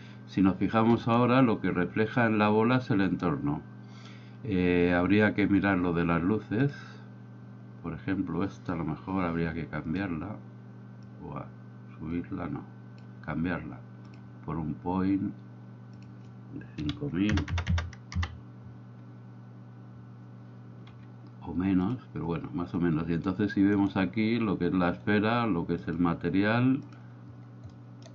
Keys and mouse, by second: 11.3-13.1 drag, 14.2 click, 16.1-19.2 drag, 17.6 KP_0, 20.9 g, 25.9-27.3 drag, 27.7 middle click.